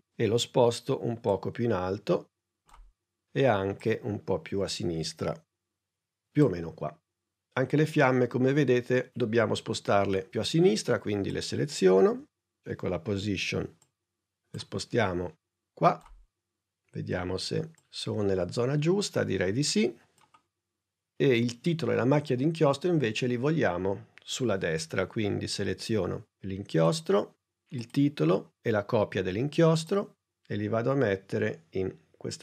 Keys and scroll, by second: 0.1 p, 12.1 p, 30.5 shift+p.